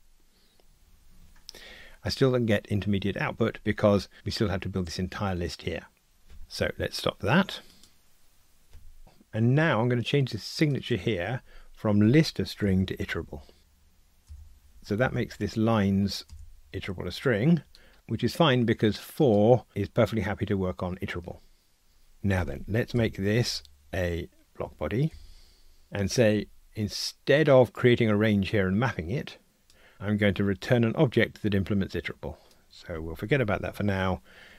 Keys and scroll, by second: 8.0 super+F2, 14.3 Return, 15.1 alt+Return, 17.9 super+z, 23.0 alt+Return, 29.9 Escape.